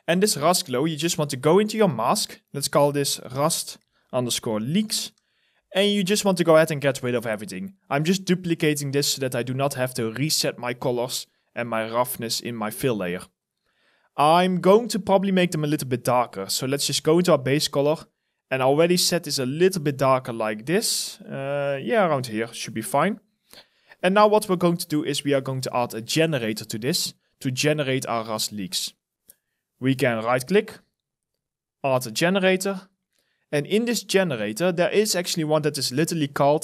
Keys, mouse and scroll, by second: 2.4 double click, 3.2-5.7 typing, 24.4 alt+middle click, 24.8 alt+right click, 30.0 right click.